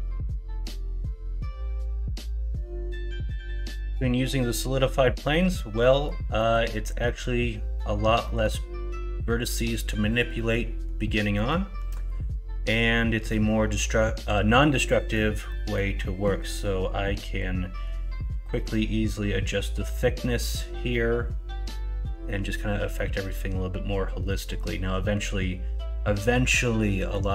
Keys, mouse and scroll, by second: 5.3 middle click, 6.3 middle click, 7.0 middle click, 8.2 middle click, 10.3 middle click, 11.3 middle click, 11.9 middle click, 12.7 middle click, 14.9 middle click, 15.4 middle click, 23.0-24.6 middle drag, 26.8 middle click.